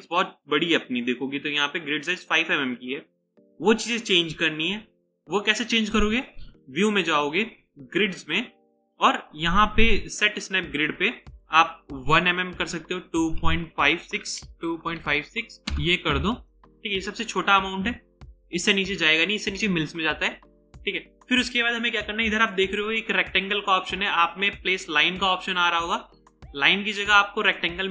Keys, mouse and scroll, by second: 12.9-15.0 typing, 15.7 Return, 24.2 right click.